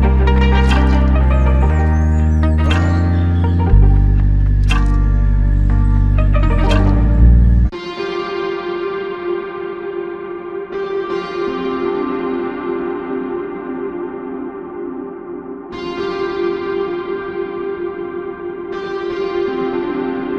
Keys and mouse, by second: 0.0 ctrl+click, 2.9 ctrl+click, 6.4 alt+click, 7.5 alt+click, 7.7 ctrl+click, 10.8 ctrl+click, 13.6 alt+click, 14.8 ctrl+alt+click, 15.7 alt+click, 17.9 f, 20.1 alt+click.